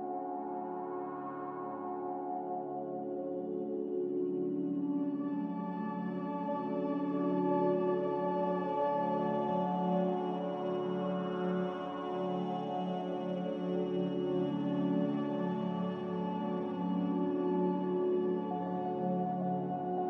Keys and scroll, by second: 9.4 Delete, 10.7 Delete, 11.6 z, 16.1 Escape, 16.7 Escape, 17.5 a.